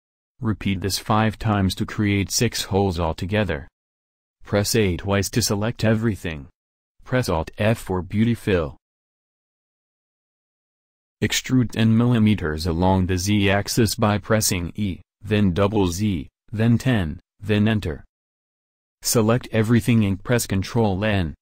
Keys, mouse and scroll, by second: 4.9 a, 5.1 a, 6.6 alt+f, 11.4 e, 19.2 a, 19.4 a, 20.9 ctrl+n.